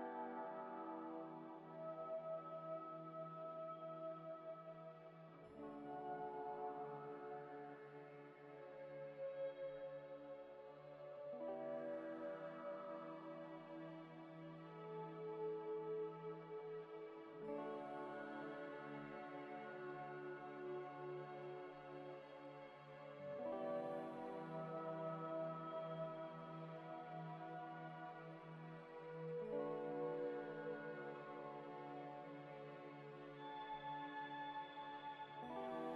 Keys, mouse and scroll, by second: 0.3 middle click, 0.4 scroll up 1, 1.2 middle click, 3.8 middle click, 4.3 scroll down 1, 5.4 middle click, 6.6 Delete, 9.9 scroll up 1, 10.2 middle click, 10.3 middle click, 10.7 g, 10.8 z, 11.3 Tab, 11.8 a, 12.4 u, 14.6 Tab, 15.0 middle click, 16.5 scroll down 1, 16.7 middle click, 18.4 scroll down 1, 21.8 scroll down 1, 23.1 double click, 24.4 ctrl+c, 26.7 scroll up 1, 27.5 ctrl+v, 28.0 scroll down 1, 28.3 middle click.